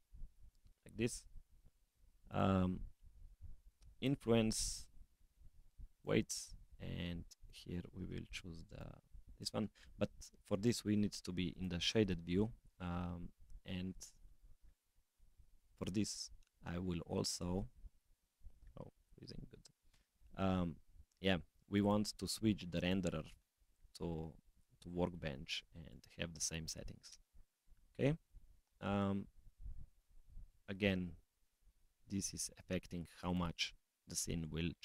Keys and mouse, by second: 1.9 click, 3.8 click, 4.8-6.1 drag, 7.3 click, 18.6 middle click, 18.6 click, 21.8 click, 22.8-24.7 drag, 25.8 click, 30.0 click, 30.5 click, 31.4 s, 33.3-34.0 middle drag.